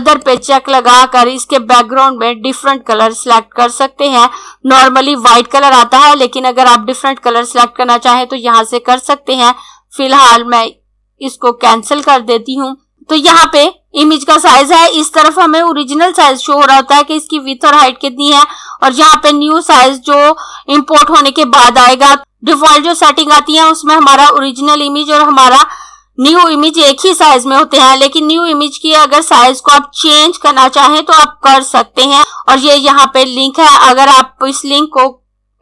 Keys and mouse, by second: 0.1 click, 11.3 click.